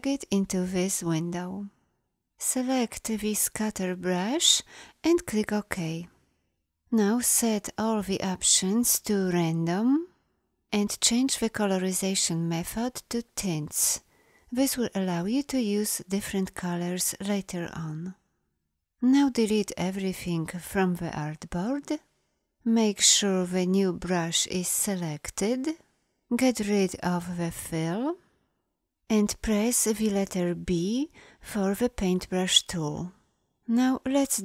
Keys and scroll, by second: 19.4 Delete, 30.5 b.